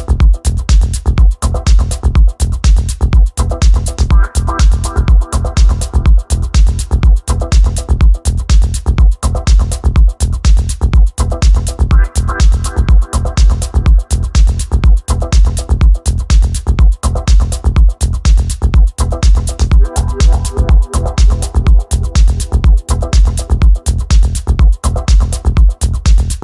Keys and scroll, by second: 2.7 4, 3.0 Return, 10.9 w, 11.6 g, 12.1 f, 13.2-15.2 typing, 16.4 f, 17.9-20.8 typing, 23.8 1, 24.0 w, 24.5 Escape.